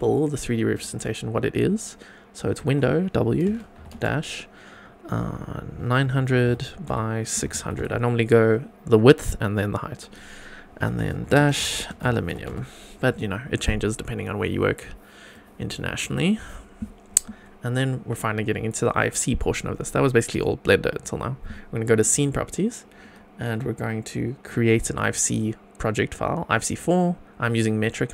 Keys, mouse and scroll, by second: 0.7-13.6 drag, 6.4 0, 7.7 0, 15.3 click, 22.0 click.